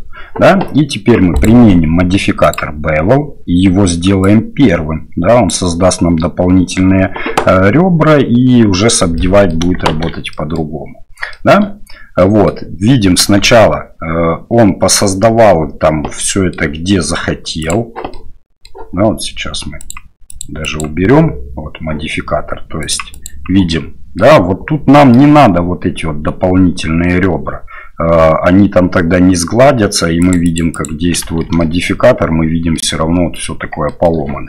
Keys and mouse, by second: 1.4-2.8 drag, 4.2-5.6 drag, 9.2 middle click, 9.9 shift+z, 10.3 middle click, 11.3 shift+middle click, 12.2 middle click, 13.4 shift+z, 16.3 middle click, 17.7 click, 18.1 middle click, 19.9 click, 22.9 click, 23.1 click, 23.7-24.2 middle drag, 24.9 middle drag, 30.2 click, 30.4 click, 30.7 click, 31.2 shift+z, 31.6 middle drag, 32.7-33.3 middle drag, 33.8 shift+middle drag.